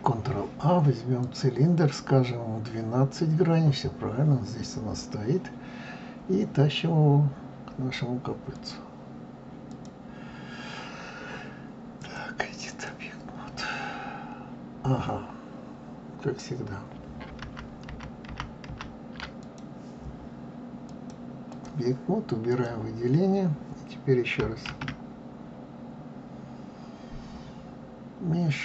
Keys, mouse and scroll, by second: 8.5-10.0 drag, 12.0-15.0 drag, 17.6 ctrl+z, 17.9 ctrl+z, 18.3 ctrl+z, 18.7 ctrl+z, 19.4 click, 20.9-22.6 drag, 24.7 shift+a.